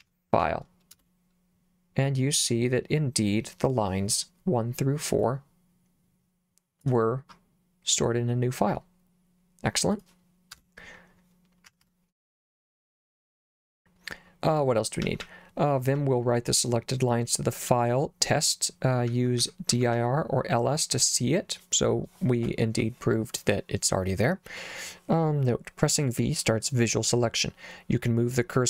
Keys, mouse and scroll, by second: 0.0-0.1 typing, 0.3 Tab, 0.9 Return, 5.3-6.8 drag, 9.9 click, 10.6 Return, 11.7 Escape, 15.1 j, 15.2 j, 19.1 j, 19.4 j, 19.7 j, 20.0 j.